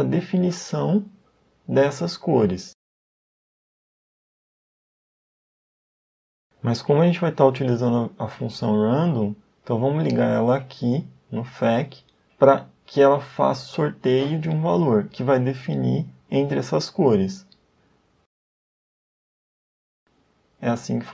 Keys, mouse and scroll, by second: 10.3 click, 17.3 click.